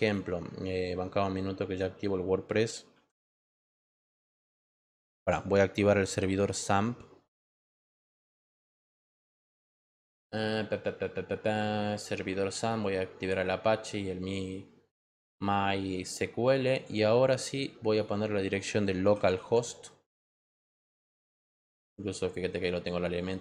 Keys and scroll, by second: 3.7 w, 5.1 BackSpace, 7.3-8.7 typing, 8.9 Return, 18.7-19.8 typing, 20.4 Return.